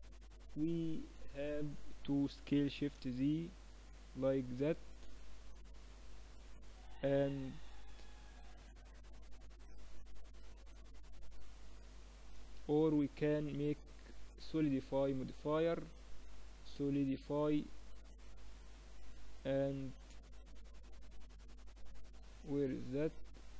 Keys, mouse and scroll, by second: 1.7 s, 13.6-17.3 drag, 19.2-21.0 drag, 23.4-23.5 drag.